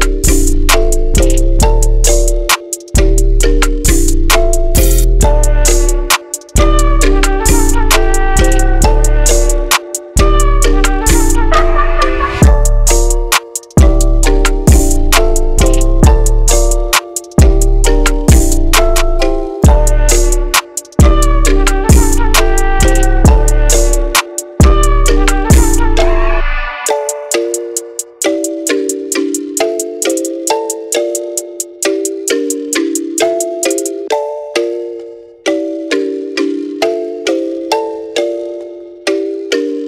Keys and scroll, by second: 3.8 Right, 4.8 Right, 5.7 Right, 12.1 Right.